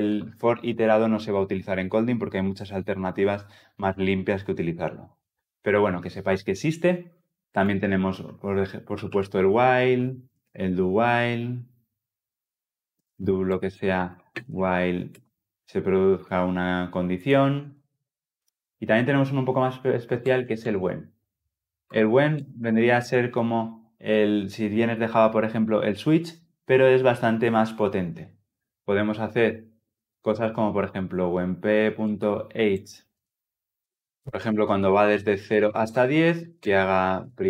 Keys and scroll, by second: 15.0 Return, 21.7 Return.